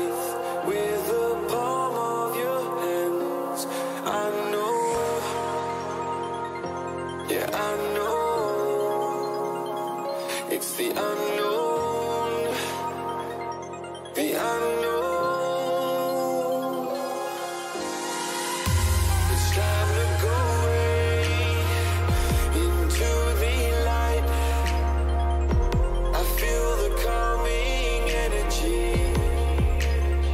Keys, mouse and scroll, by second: 12.3 KP_3, 14.4 z, 15.1-16.8 middle drag, 18.6 a, 18.9 a, 24.3-30.3 middle drag.